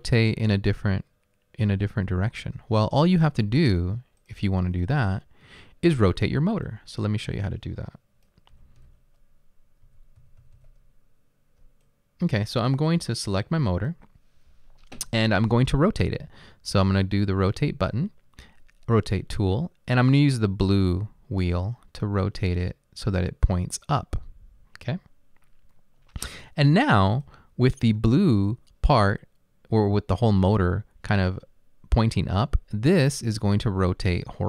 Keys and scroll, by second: 8.6-12.0 typing.